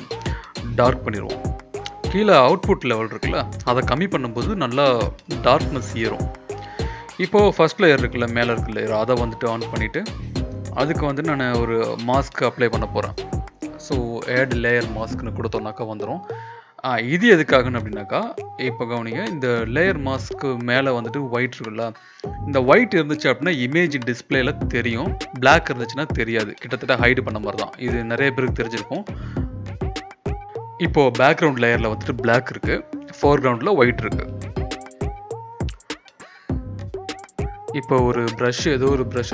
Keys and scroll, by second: 5.7 Return, 27.4 ctrl+BackSpace, 37.0 e, 38.5-39.3 typing.